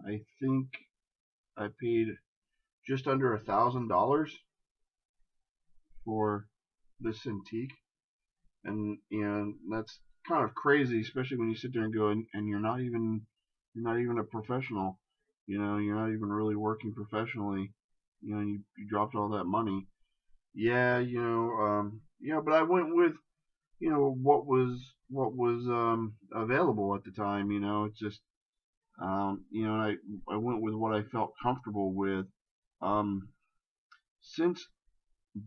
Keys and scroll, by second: 15.6 shift+space, 26.6 shift+space.